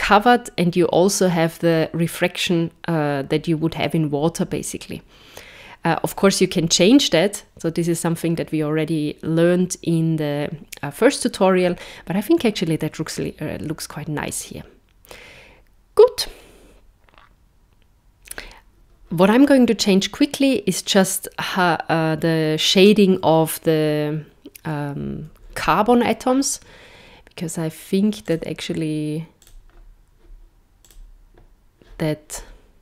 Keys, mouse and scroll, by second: 28.2 click, 29.4 click, 30.8 click.